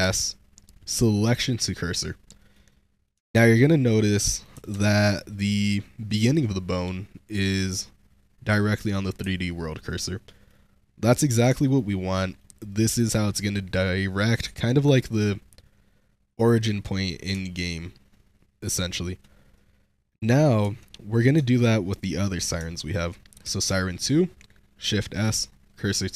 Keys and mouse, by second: 2.3 shift+middle click, 2.3 click, 2.6 click, 2.9 middle click, 3.2 shift+click, 3.3 middle click, 3.9 click, 4.4 z, 4.7 shift+click, 9.1-9.8 middle drag, 9.1 z, 10.2 drag, 10.2 right drag, 11.5 shift+click, 11.8-12.3 shift+drag, 12.6-13.2 drag, 18.3-18.7 shift+drag, 18.9 shift+middle click, 19.4 click, 20.5 Tab, 21.4 shift+drag, 22.2 click, 22.7 shift+drag, 23.5 shift+s.